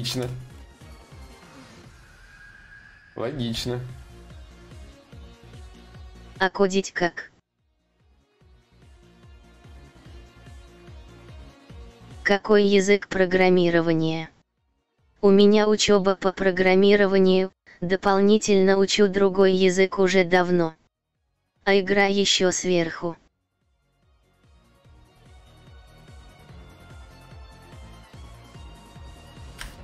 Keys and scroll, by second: 20.8 Return, 29.2 Return.